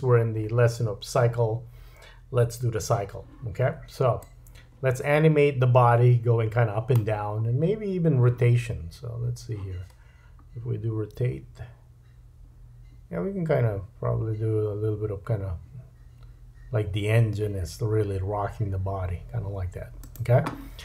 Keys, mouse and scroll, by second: 4.2-5.3 drag, 11.1 r.